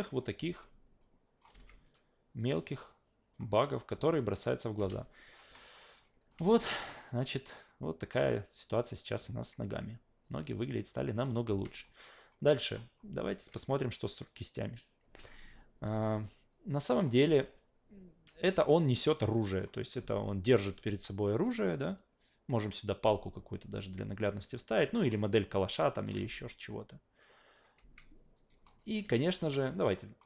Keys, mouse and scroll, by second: 0.4 s, 1.0-1.4 drag, 1.5 alt+v, 2.6 alt+right click, 2.9-3.3 alt+drag, 4.8 alt+v, 5.3 click, 5.6 alt+middle click, 5.9 alt+right click, 6.0 alt+drag, 6.4 alt+v, 6.6 alt+middle drag, 6.9 alt+right drag, 7.5 alt+middle drag, 10.2 alt+click, 11.4 alt+v, 11.7 alt+middle click, 12.0 alt+click, 12.4 alt+right click, 12.8 alt+middle drag, 13.8 click, 16.5-17.0 drag, 17.2 alt+v, 18.2 alt+v, 18.5 alt+middle drag, 18.8 alt+right drag, 19.0-19.6 alt+drag, 25.9 click, 26.2 alt+v, 27.8 alt+v, 28.3 alt+right drag, 28.6 alt+middle drag, 29.2 click, 29.7 shift+right click.